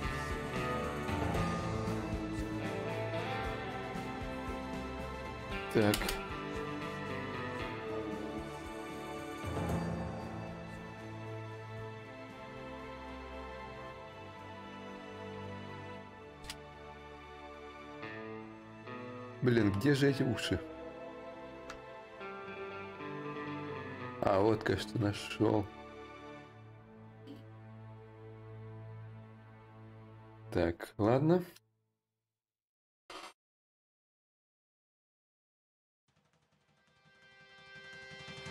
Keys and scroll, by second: 5.6 space, 15.6 ctrl+a, 16.0 space, 25.7 space, 35.1 b, 36.7 b, 37.1 s.